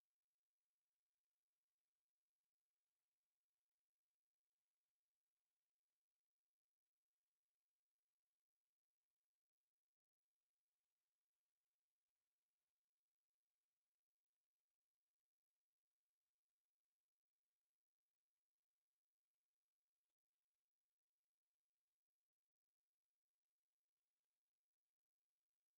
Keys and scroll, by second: 1.2 Escape, 1.4 o, 1.5 space, 2.3 Escape, 2.4 m, 2.8 space, 4.1 Escape, 4.4 t, 4.6 space, 4.9 Escape, 5.0 m, 5.3 space, 5.7 Escape, 8.0 Escape, 8.2-9.8 typing, 8.7 Escape, 9.3 Escape, 10.8 Escape, 11.2 space, 11.7 e, 11.7 space, 12.1 Escape, 12.8 l, 12.9 space, 13.6 F8, 14.8-18.9 typing, 16.3 Escape, 17.4 Return, 18.0 Escape, 18.7 Escape, 19.1 Escape, 19.9-25.7 typing, 20.7 Escape, 21.2 Escape, 21.9 Escape, 22.5 Escape, 23.4 Escape, 25.5 Escape.